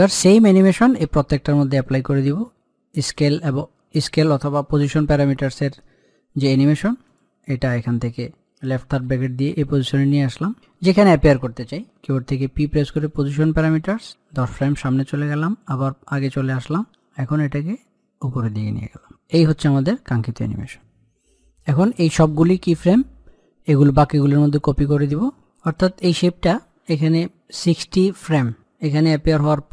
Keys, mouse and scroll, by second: 4.9-6.9 middle drag, 6.9 click, 12.1 p, 12.9 click, 14.3 Page_Down, 15.4 click, 17.3-19.3 shift+drag, 25.6 click, 29.1-29.7 drag.